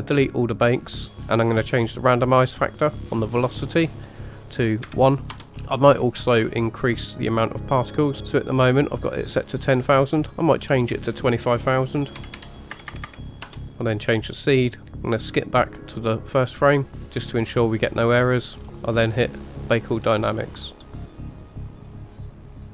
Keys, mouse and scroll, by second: 0.1 click, 1.1-2.8 scroll down 1, 3.2-5.4 drag, 5.5-8.2 scroll up 9, 8.2 click, 8.2 KP_0, 10.5-13.6 drag, 12.9 KP_0, 13.0 KP_0, 14.2 click, 15.9 click, 18.1-19.3 scroll down 4, 19.3-19.7 scroll down 1, 19.7-22.7 drag.